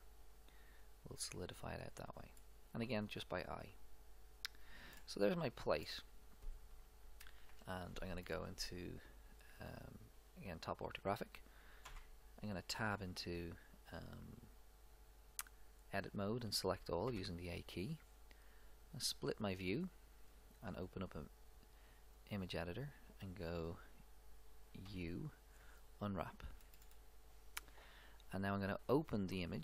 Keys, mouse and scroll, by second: 0.0-1.9 drag, 2.4-4.7 middle drag, 5.0-7.5 middle drag, 7.5 KP_7, 8.2 middle click, 11.9 Tab, 16.8 a, 17.3 a, 19.1-20.2 drag, 20.5 click, 21.3-23.3 drag, 24.9 u, 26.7-28.3 middle drag.